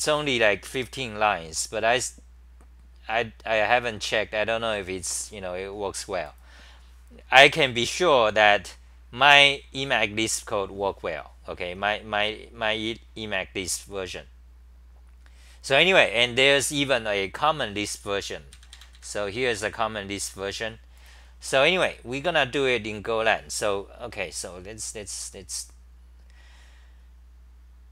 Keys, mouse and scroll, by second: 8.4-9.1 typing.